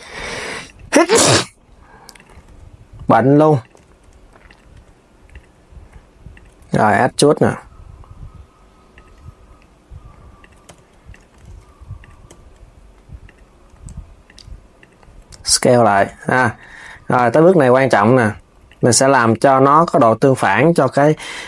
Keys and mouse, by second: 0.3 click, 1.3 s, 10.3 g, 14.5 click, 15.0 s, 16.2 click, 16.5 g, 20.7 KP_7.